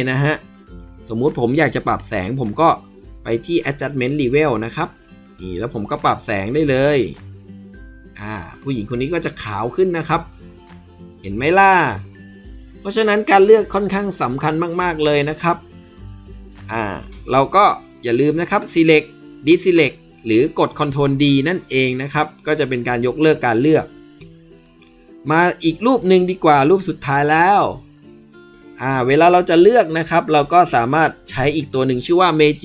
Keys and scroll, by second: 21.7 ctrl+d.